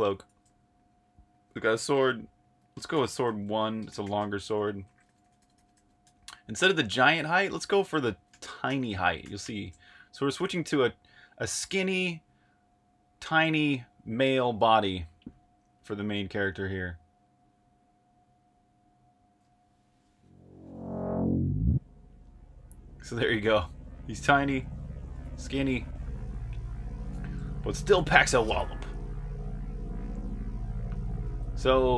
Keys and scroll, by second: 0.0-6.8 typing, 8.0-11.7 typing, 24.5-25.6 typing, 27.1-28.4 typing, 29.7-31.9 typing.